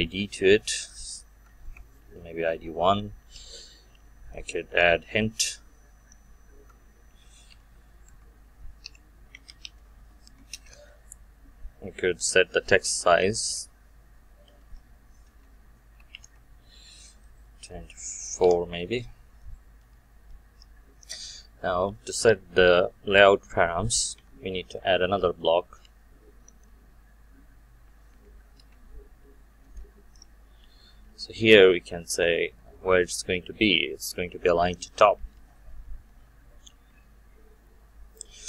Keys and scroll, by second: 15.3 Return, 28.5 Return.